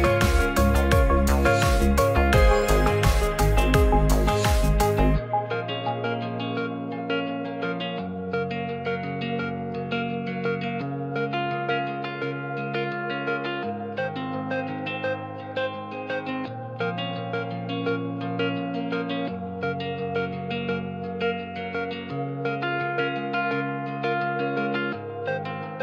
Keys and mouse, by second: 1.9 shift+Tab, 6.1-8.1 drag, 8.9 s, 10.8 click, 11.1 s, 11.3 z, 14.1 click, 14.2 g, 14.3 z, 18.2 click, 18.8 middle click, 20.9 ctrl+middle click, 23.0-24.3 drag.